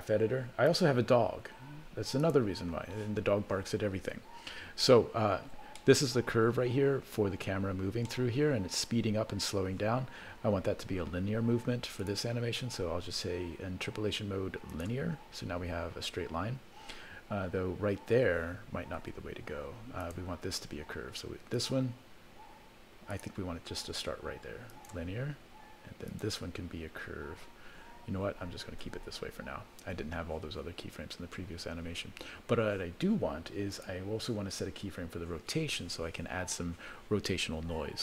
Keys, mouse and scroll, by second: 2.4 click, 3.8-5.1 scroll down 12, 4.8 middle click, 5.7 middle click, 7.6-8.3 scroll down 5, 8.1 middle click, 12.0-14.9 right drag, 19.0 ctrl+z, 20.0 click, 21.5 click, 23.1-24.2 right drag, 24.7 right click, 26.1 click, 28.4 ctrl+z, 28.9 ctrl+z, 33.7 click.